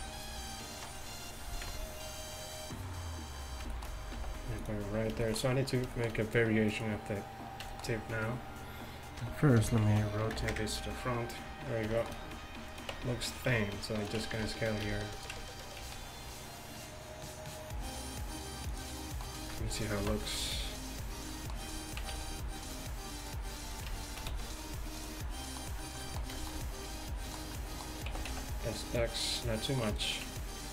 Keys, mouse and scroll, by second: 0.0 alt+r, 1.7 KP_1, 4.2 g, 10.6 r, 13.0 Tab, 15.9 s, 20.1 KP_Decimal, 24.4 s.